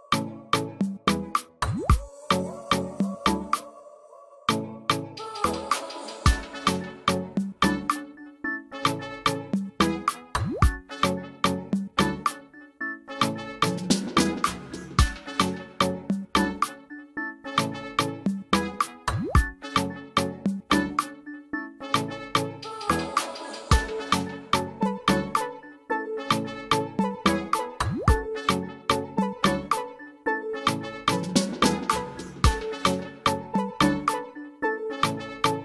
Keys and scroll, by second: 9.5 typing, 18.7 ctrl+alt+space, 19.2 alt+space, 24.0 ctrl+alt+space.